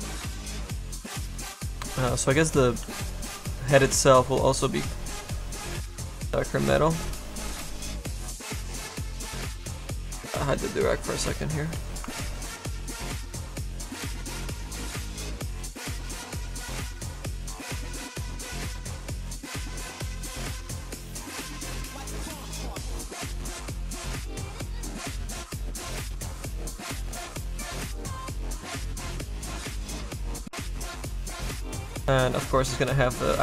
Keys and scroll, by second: 11.8 s.